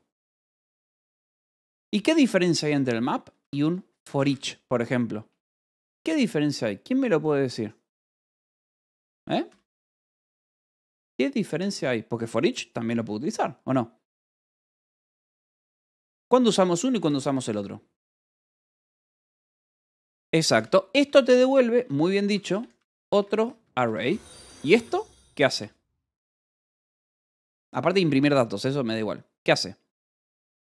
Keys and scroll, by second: 2.4-5.2 typing, 7.6-10.2 typing, 11.3-12.2 typing, 13.4 ctrl+g, 14.1 Escape, 16.6 k, 17.1 j, 17.4 Escape, 19.9 k, 21.0-25.4 typing, 21.0 Escape, 26.0 Escape, 30.1 Escape.